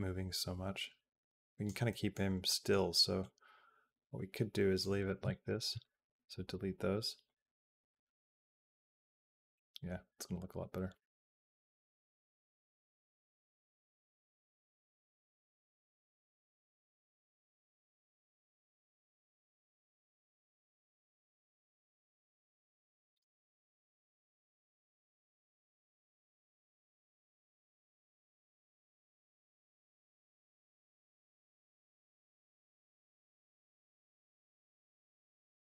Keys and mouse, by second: 1.7 middle click, 2.3 middle click, 3.0-4.6 drag, 4.8 click, 5.0 b, 5.5 x, 7.1-23.0 drag, 23.7 click, 24.4 middle click, 24.7 shift+middle click, 25.5-27.7 drag, 27.9 middle click, 29.1-35.3 drag.